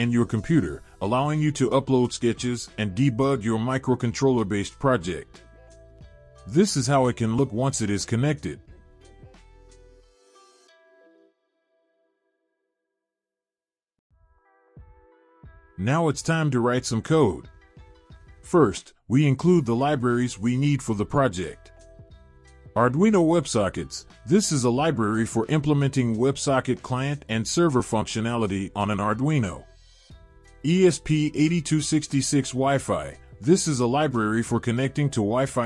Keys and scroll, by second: 20.0 Return, 20.4 Return, 20.8 Up, 21.1 Up, 21.4 Up, 22.4 ctrl+v.